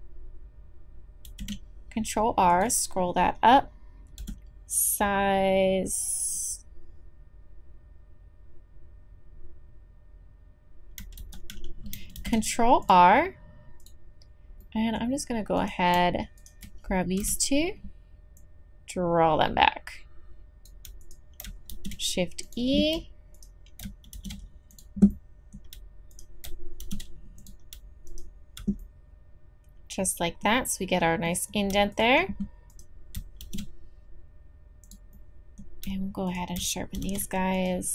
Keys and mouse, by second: 1.3 ctrl+r, 4.2 s, 11.2 ctrl+z, 12.2 ctrl+r, 15.6 right click, 17.2 KP_3, 20.4 middle click, 21.0 click, 21.7 shift+e, 23.3 click, 24.1 shift+e, 26.1 click, 26.8 shift+e, 30.0 click, 30.1 click, 31.0 middle click, 31.1 middle click, 33.4 shift+e.